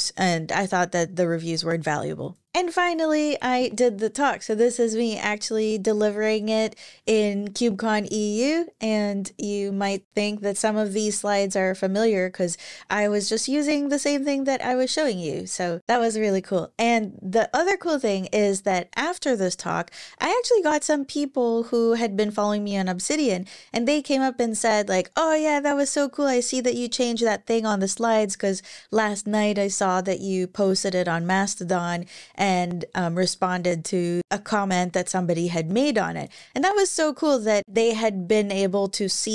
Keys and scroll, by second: 2.2 super+w.